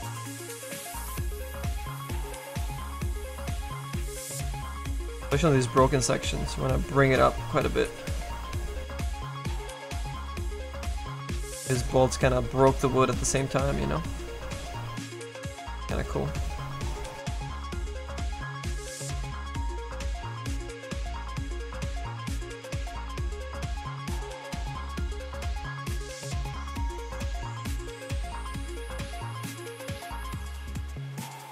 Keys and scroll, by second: 27.0 Escape.